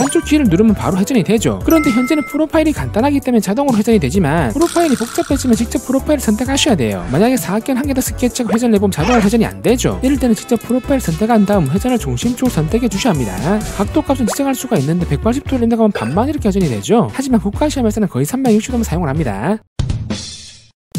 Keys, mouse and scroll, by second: 7.9 click, 9.9 click, 10.2 click, 10.6 click, 11.4 click, 12.3 click, 12.8-13.4 scroll up 1, 17.3 3, 19.2 click.